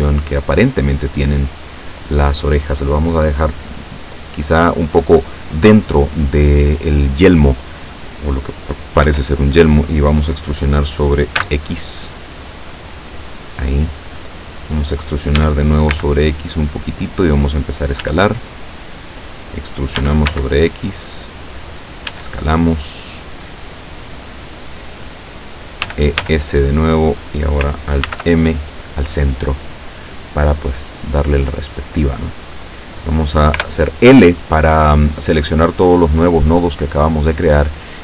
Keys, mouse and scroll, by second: 0.0-2.2 drag, 3.5-5.1 drag, 9.1 e, 11.5 x, 13.9 click, 15.4 e, 16.0 x, 17.1 click, 18.1 s, 18.9 click, 20.1 e, 20.3 x, 21.5 click, 22.2 s, 24.5 click, 25.9 e, 26.3 s, 27.1 click, 28.2 alt+m, 28.8 click, 33.6 l, 37.1 click.